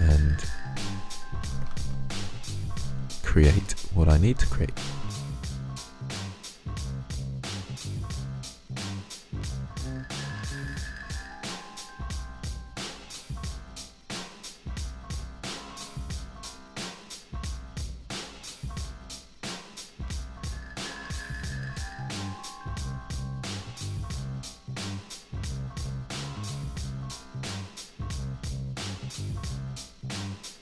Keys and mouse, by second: 6.3 middle click, 6.3 click, 6.9 click, 8.2 middle click, 8.6 middle click, 8.8 click, 8.8 middle click, 9.3 middle click, 9.4 click, 10.4 click, 10.7-11.3 middle drag, 11.3-11.9 drag, 11.9 middle click, 12.0-12.8 drag, 12.9-13.3 drag, 13.6 click, 14.2 drag, 14.5 click, 15.3 ctrl+z, 15.9 drag, 16.2 middle click, 17.0 click, 17.3-17.6 drag, 17.6 ctrl+z, 17.8 ctrl+z, 18.3 click, 20.5 middle click, 20.9 click, 21.1 middle click, 21.3 ctrl+z, 21.7 click, 22.4-22.9 drag, 23.2 click, 23.5-24.6 drag, 24.7-26.0 drag, 26.8 click, 27.2 f, 27.6 click, 27.8 f, 27.9-28.6 drag, 28.9-29.2 drag, 30.0 f, 30.1-30.6 drag.